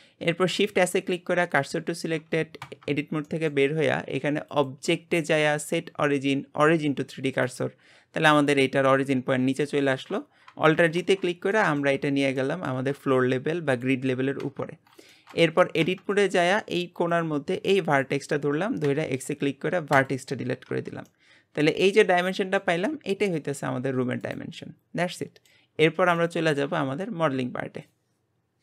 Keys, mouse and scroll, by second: 0.0 middle click, 0.5 shift+s, 2.6 Tab, 3.3-4.5 middle drag, 4.5 click, 8.3 click, 10.9 alt+g, 11.5 middle click, 12.1 scroll down 3, 12.4-14.8 middle drag, 14.8 scroll up 2, 15.1 shift+middle click, 15.8 Tab, 17.1 click, 18.8 x, 20.7 Tab, 21.1-22.7 middle drag, 22.7 g, 25.0 middle click, 25.7-26.2 scroll up 2, 26.2-28.6 middle drag.